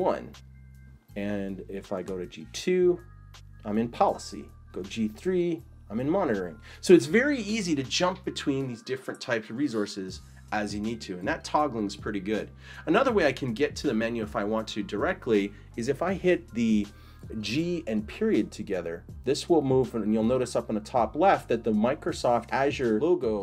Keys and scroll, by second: 0.0-0.3 typing, 2.1-3.0 typing, 4.6-5.5 typing, 17.4 g, 18.3 ..